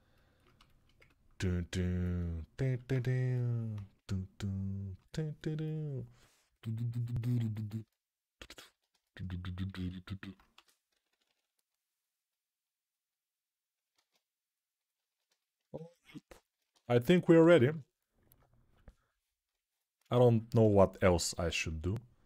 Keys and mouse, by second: 2.7 alt+q, 3.5-4.7 ], 9.4 alt+q, 9.4 click, 10.3 g, 10.7 ], 10.8 ], 11.0 ], 13.6-17.1 ctrl+drag, 13.7 ctrl+z, 16.5-17.4 typing, 21.9 alt+q.